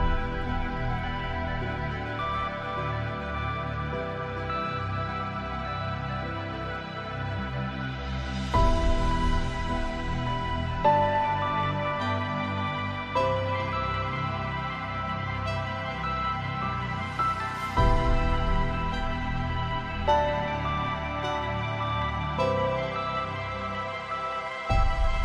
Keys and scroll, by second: 21.2 ctrl+j, 22.7 ctrl+space.